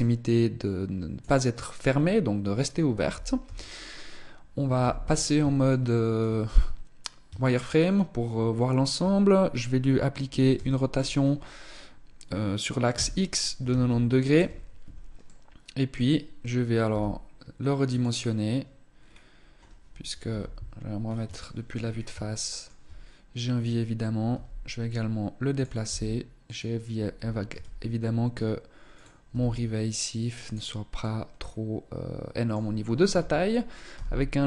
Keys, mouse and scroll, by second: 1.7-2.1 scroll up 3, 3.2 t, 4.6 z, 5.4 shift+middle click, 6.0-6.9 scroll up 2, 6.9 shift+middle click, 10.3 r, 15.0 middle click, 16.6 s, 18.8-19.8 scroll up 2, 19.8 scroll up 1, 20.0 KP_1, 20.8 scroll down 3, 21.2 shift+middle click, 21.8 shift+middle click, 24.0 g, 25.6 s, 27.2 g, 29.0 s, 30.8 middle click, 32.8 z, 33.7 g.